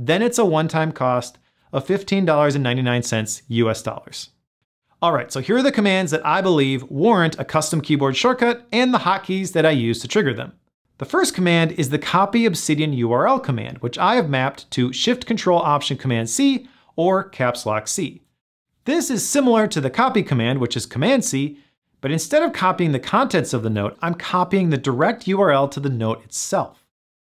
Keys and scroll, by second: 24.9 ctrl+alt+shift+super+c.